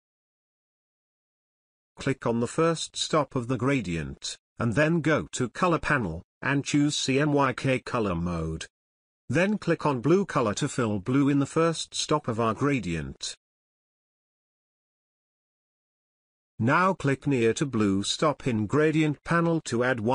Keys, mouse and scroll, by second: 5.9 click, 10.4-13.2 drag.